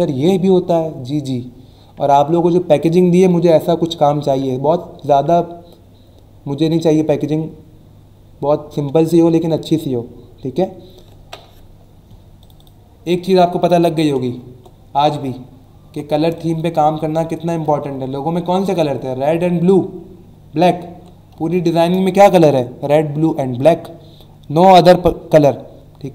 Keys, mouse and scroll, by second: 12.4 click, 14.4 alt+scroll down 1, 15.2-15.7 alt+scroll up 2, 16.2 space, 16.3 click, 16.7 space, 18.6 click, 20.7 alt+scroll down 1, 21.3 space, 21.5 click, 21.8 space.